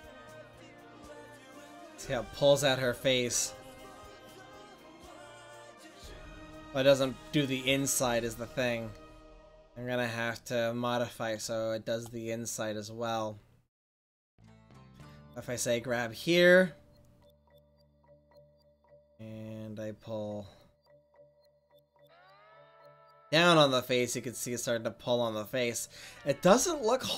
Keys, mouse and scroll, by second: 10.6 middle click, 11.7-13.7 middle drag, 15.7-17.2 right drag, 19.5-20.5 drag.